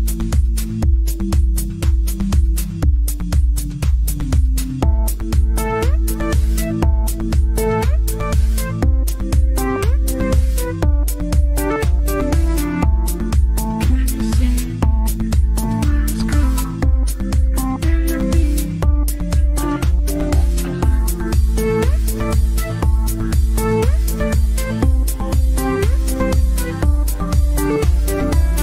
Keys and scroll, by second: 8.4 Delete.